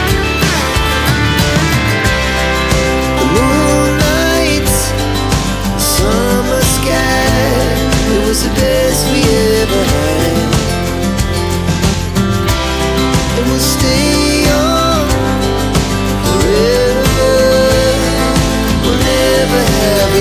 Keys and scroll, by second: 2.5 t, 2.6 space, 4.3 r, 4.4 space, 6.8 KP_Subtract, 7.2 KP_9, 7.4 KP_0, 7.5 Return, 11.1 t, 11.2 space, 13.0 f, 13.2 space, 15.0 ctrl+g, 17.8-18.5 typing.